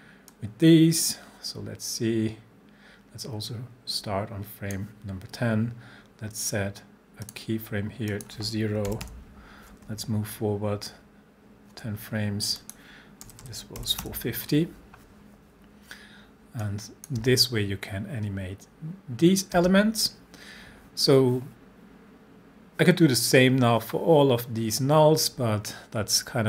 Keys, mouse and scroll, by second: 8.9 0, 10.1 shift+Page_Down, 12.6 click, 13.0-14.3 typing, 16.7-17.3 click, 17.2 space, 19.6 space.